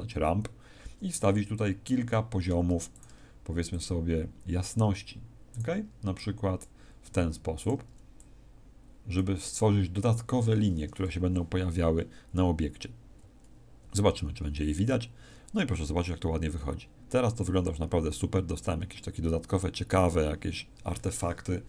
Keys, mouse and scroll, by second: 0.6-1.1 scroll down 2, 1.5 click, 2.9 ctrl+click, 3.7 click, 5.5 ctrl+click, 6.1 click, 7.5 click, 8.1 click.